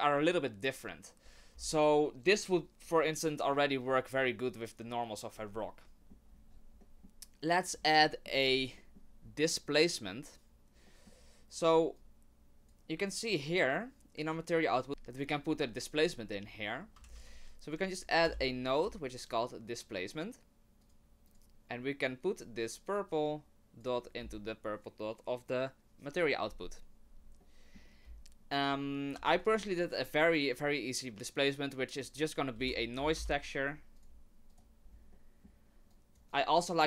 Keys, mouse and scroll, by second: 6.0 middle click, 6.0-7.2 scroll down 5, 10.9 middle click, 12.0 click, 16.5 middle click, 17.0 shift+a, 22.9 click, 27.4 middle click, 27.9-28.2 scroll down 1, 28.2-28.7 scroll up 2, 28.7-29.1 scroll down 2, 29.2 shift+a, 34.8-35.9 scroll up 3, 35.1 middle click, 35.9 click, 36.3 click, 36.7 middle click.